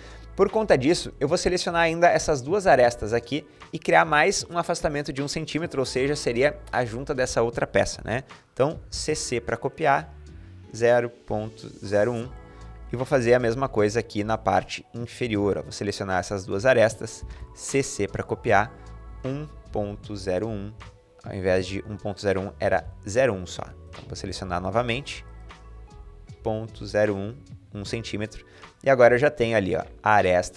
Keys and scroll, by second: 8.5 typing, 10.5-13.6 typing, 16.7-17.5 typing, 18.6-20.5 typing, 20.5 Return, 21.1 Escape, 22.6 Delete, 24.7 typing, 25.9-27.1 typing, 27.9 Escape.